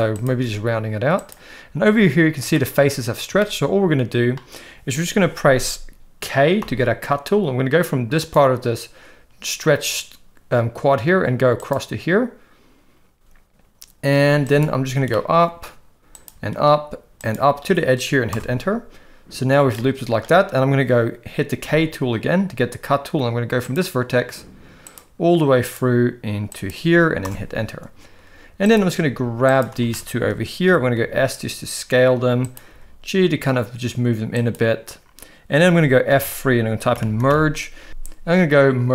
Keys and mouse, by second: 0.1 click, 0.3 g, 2.5 shift+middle click, 3.4 shift+middle click, 6.6 k, 15.1-18.4 shift+middle drag, 19.7 shift+middle click, 21.6 k, 28.6 click, 29.9 shift+middle click, 31.0 s, 32.7 g, 36.1 F3.